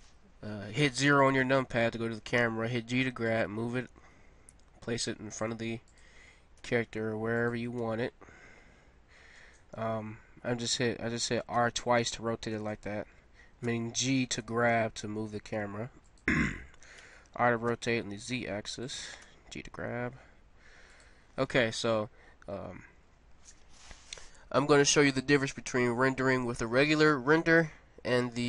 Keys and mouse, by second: 1.4-3.2 drag, 2.4 g, 3.8 g, 5.5 g, 6.6 r, 7.8 g, 11.5 r, 13.7 g, 16.9 r, 19.2 g, 25.7-28.4 middle drag.